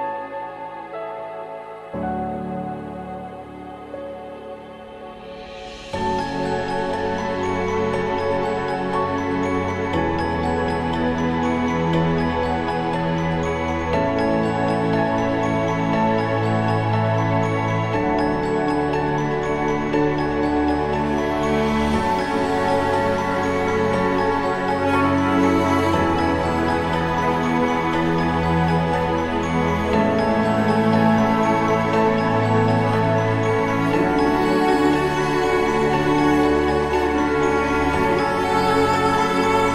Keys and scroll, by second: 8.6 ctrl+-, 8.8 ctrl+-, 15.2 ctrl+=, 15.4 ctrl+=, 15.7 ctrl+=, 16.0 ctrl+=.